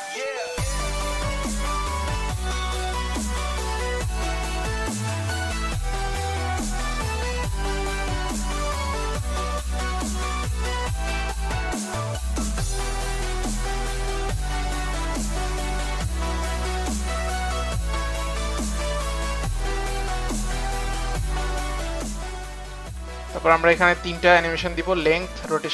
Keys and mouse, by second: 2.0 click, 4.9 click, 5.0 click, 6.1 click, 6.7 click, 7.4 Return, 9.7 click, 13.4 click, 15.6 click, 17.6 click, 18.6 click, 19.6 KP_0, 20.2 Return, 21.6 click, 22.2 Return, 22.2 KP_0, 22.9 u.